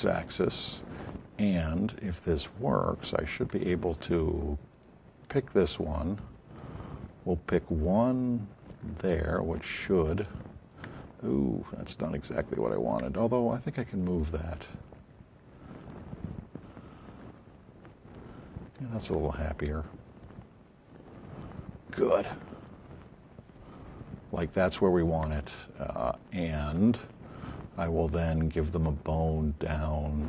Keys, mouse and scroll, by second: 0.9 alt+click, 4.8 click, 6.7 click, 11.9 alt+click, 17.5 alt+click, 22.3 alt+click, 26.1 click.